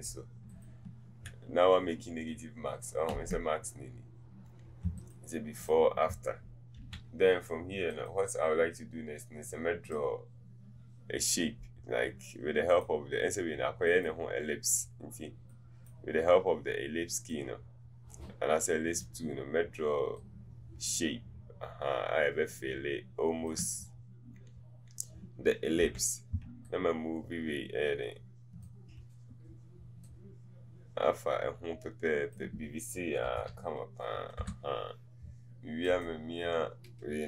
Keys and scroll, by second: 33.4 Right, 33.5 Right.